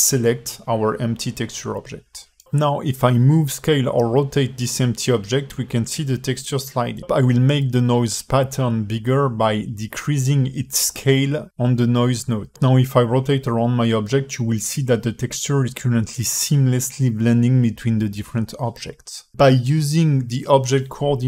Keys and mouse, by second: 0.4 click, 1.7 alt+shift+middle drag, 2.5 s, 5.7 click, 8.4-11.8 drag, 15.9-21.2 alt+middle drag.